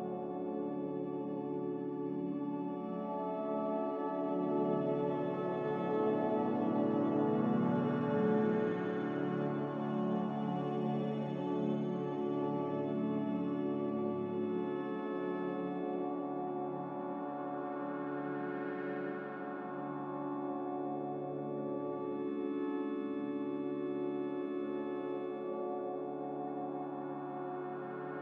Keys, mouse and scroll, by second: 0.3 a.